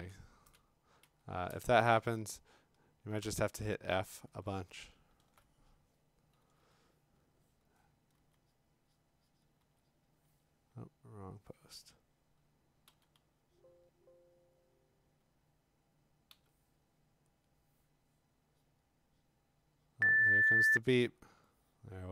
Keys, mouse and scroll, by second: 0.5 click, 1.0 f, 2.1-3.2 f, 3.2 click, 3.6 scroll, 4.5-5.0 scroll, 8.2 x, 9.6 x, 11.3 click, 12.9 d, 13.1 d, 13.9 click, 14.7 click, 16.3 b, 17.4 click, 18.3-20.4 drag, 21.8-22.1 click, 21.9 click.